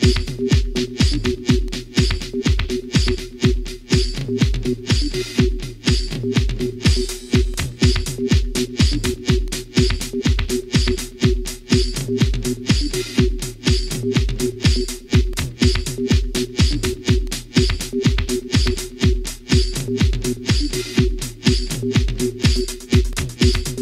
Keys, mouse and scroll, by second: 0.0 shift+click, 0.4 shift+scroll up 1, 1.0 shift+middle click, 1.7-2.4 shift+scroll up 1, 2.5 shift+click, 3.2 shift+click, 4.0 shift+scroll up 2, 4.2 shift+scroll down 2, 4.7-5.4 shift+middle drag, 6.0 shift+a, 8.3 click, 9.4 click, 10.0 click, 12.0 click, 13.6 scroll up 1, 14.4-15.2 middle drag, 16.2-17.5 drag, 18.0-19.0 drag, 19.5-20.8 drag, 21.6-22.9 drag, 23.3-23.6 scroll down 1.